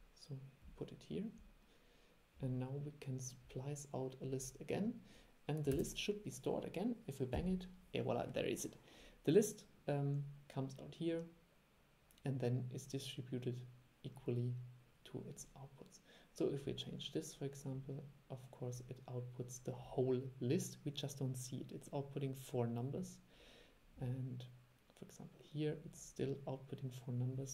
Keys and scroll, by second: 5.8 super+e.